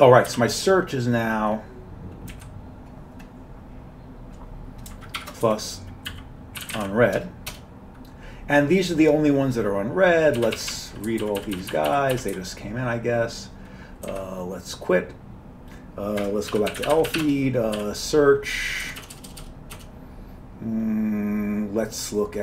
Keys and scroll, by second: 0.3 typing, 2.3 Down, 5.2-7.5 typing, 7.5 Return, 10.4-12.8 typing, 14.1 q, 16.3 Escape, 16.3-19.4 typing.